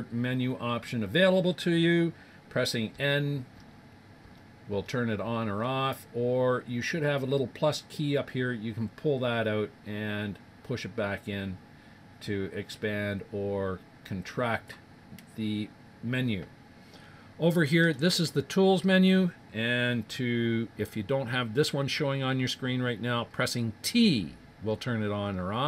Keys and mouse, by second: 2.9-5.2 typing, 7.7-9.5 drag, 17.7-19.8 middle drag, 24.0-25.6 typing.